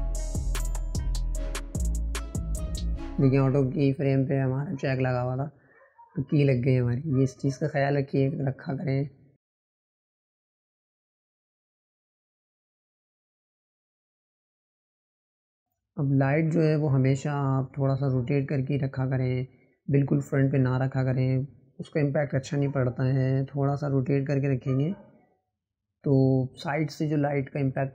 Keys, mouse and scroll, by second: 1.3-2.4 drag, 4.9 ctrl+z, 5.2-7.7 right drag, 7.7-8.8 drag, 10.6-12.2 drag, 13.6 scroll up 1, 14.3 scroll up 2, 15.4 click, 17.2-18.3 drag, 22.5-23.5 drag, 26.5-27.9 drag.